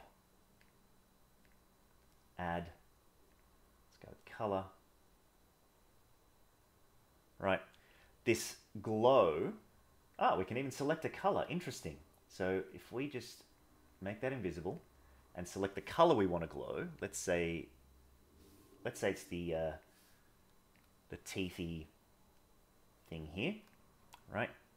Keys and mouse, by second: 0.7-1.5 drag, 2.8-3.4 drag, 4.6-9.3 drag.